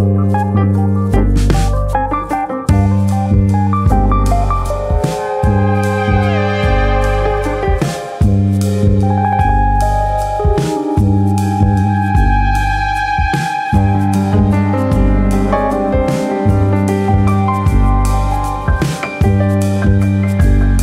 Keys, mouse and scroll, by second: 0.7 shift+d, 2.1 click, 5.4 click, 7.0-7.8 scroll down 1, 9.2 3, 9.9 alt+click, 10.7 ctrl+KP_Add, 10.9 ctrl+KP_Add, 12.1 ctrl+KP_Subtract, 12.3 ctrl+KP_Subtract, 13.8 click, 16.0 middle click, 16.9 middle click, 18.1 shift+middle click, 18.4 shift+middle click, 19.0 click, 19.6 l, 20.5 KP_7.